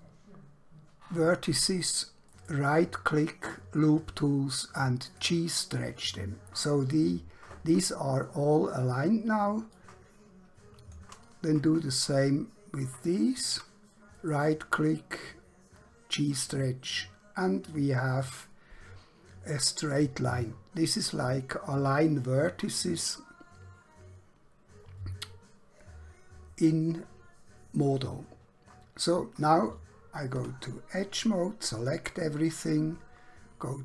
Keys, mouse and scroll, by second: 2.4 right click, 5.0 click, 9.8 click, 11.9 shift+click, 14.2 right click, 16.2 click, 20.0 click, 30.4 2, 31.1 click.